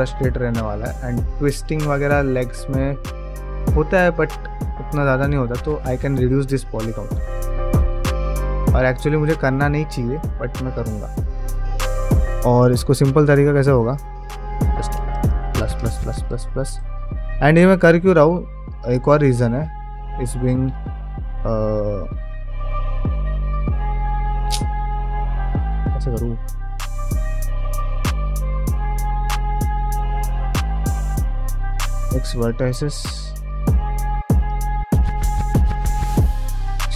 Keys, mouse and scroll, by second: 0.1 middle click, 0.4 shift+middle click, 4.4-15.5 middle drag, 15.5 ctrl+KP_Add, 15.5 alt+click, 16.0 ctrl+KP_Add, 18.5 alt+shift+click, 19.1 2, 19.9 ctrl+x, 20.6 ctrl+z, 20.9 middle click, 21.6 2, 29.3 middle click, 30.0 ctrl+z, 30.4 middle click, 31.3 x, 32.7 2, 33.2 alt+click, 34.2 alt+shift+click, 34.8 f, 35.5 ctrl+z, 36.3 KP_Divide.